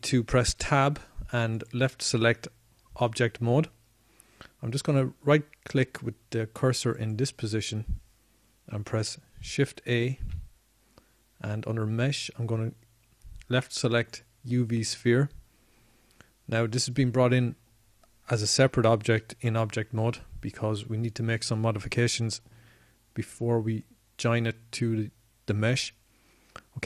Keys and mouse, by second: 1.7 middle click, 3.7 Tab, 13.5 shift+a.